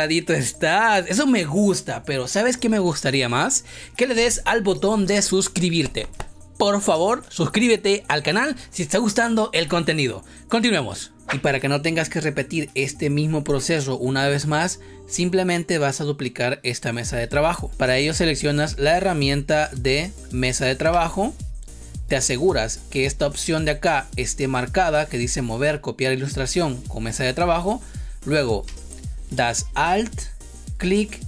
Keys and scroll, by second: 28.6 space.